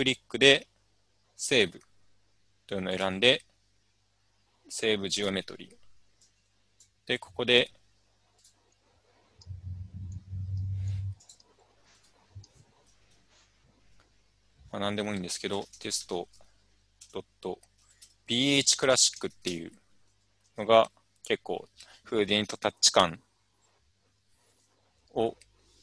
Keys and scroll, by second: 13.1-16.5 typing, 14.0-14.7 Right, 17.5-20.4 typing.